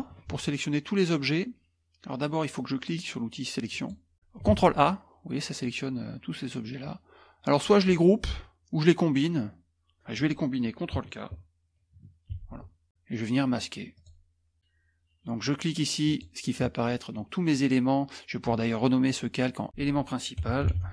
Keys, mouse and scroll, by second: 0.4 ctrl+a, 3.7 click, 4.5 ctrl+a, 12.4 ctrl+k, 13.9 click, 16.0 click, 19.7 click, 20.8-20.9 typing.